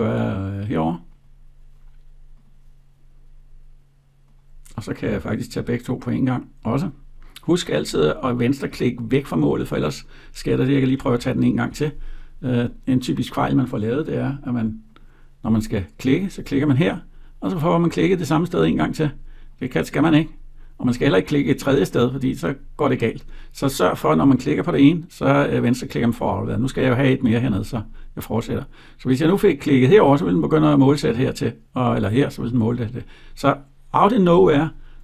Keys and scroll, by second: 10.8 ctrl+z.